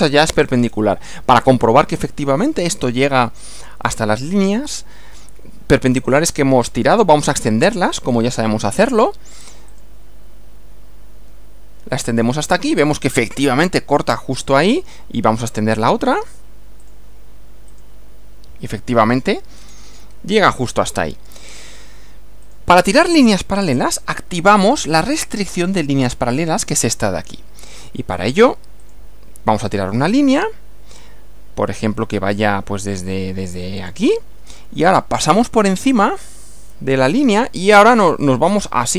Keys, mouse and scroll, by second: 0.3-0.9 scroll down 2, 1.4-1.8 scroll up 2, 7.5 click, 9.7 click, 12.1 click, 16.9 click, 17.7 click, 18.9 click, 19.2 middle click, 19.5-19.9 scroll down 2, 20.6 shift+middle click, 21.7 shift+scroll up 2, 22.5 click, 24.6 click, 28.8 click, 33.8 click.